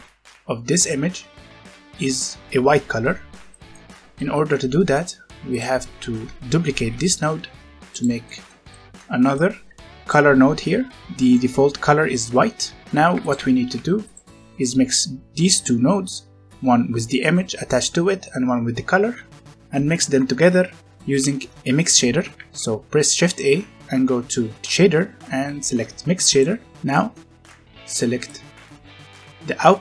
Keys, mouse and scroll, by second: 3.5 middle click, 3.9 scroll down 1, 4.1 middle click, 5.4 click, 6.7 shift+d, 7.9 click, 8.2 middle click, 9.3 click, 10.3 scroll up 1, 11.1 middle click, 12.5 scroll down 1, 13.2 click, 13.6 g, 14.0 click, 20.6 shift+Num_Lock, 22.1 shift+a, 26.2 click, 26.7 scroll down 1, 26.9 middle click, 28.2 click.